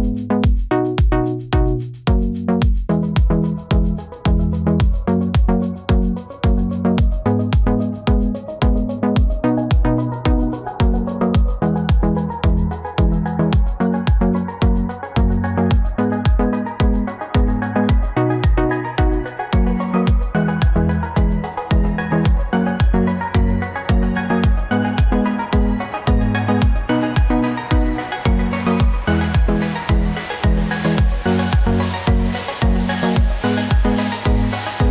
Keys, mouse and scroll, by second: 3.9 double click, 4.3 double click, 4.7 double click, 5.0 double click, 5.2 double click, 5.5 double click, 5.8 double click, 6.1 double click, 6.6 double click, 6.9 double click, 7.2 double click, 7.5 double click, 7.9 double click, 8.3 double click, 8.6 double click, 9.0 double click, 12.2 double click.